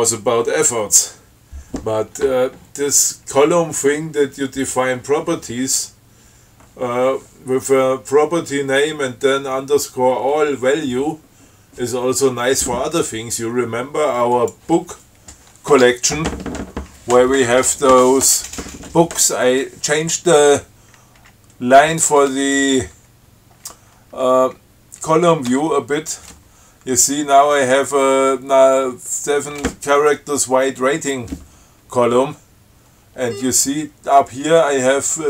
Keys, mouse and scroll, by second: 13.3 scroll down 2, 14.6 click, 16.0 Tab, 21.5 Down, 25.8 Tab, 33.5-33.8 scroll up 2.